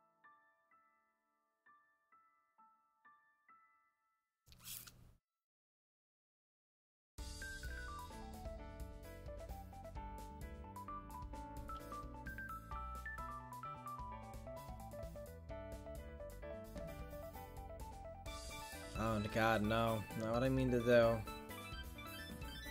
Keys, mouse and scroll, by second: 0.0 middle drag, 1.5-2.6 right drag, 9.2-10.5 drag, 9.5 middle click, 10.7 click, 10.7 middle click, 11.4 ctrl+z, 13.9 click, 13.9 middle click, 17.3-18.5 drag, 18.5 ctrl+z.